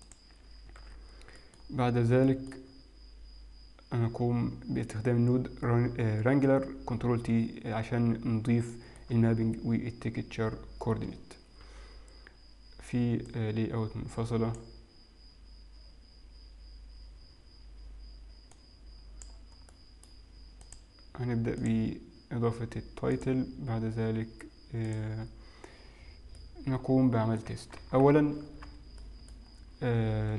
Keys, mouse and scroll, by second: 0.1 click, 0.9 ctrl+t, 1.1 scroll down 3, 1.4 middle click, 2.6 middle click, 2.6 scroll up 7, 2.8 scroll down 4, 8.7 middle click, 11.7 n, 13.3 click, 18.6 click, 19.7 middle click, 20.7 click, 23.2 click, 26.0 scroll down 3, 26.4 middle click, 28.5-29.4 scroll down 5, 29.4 middle click, 29.5 scroll up 3.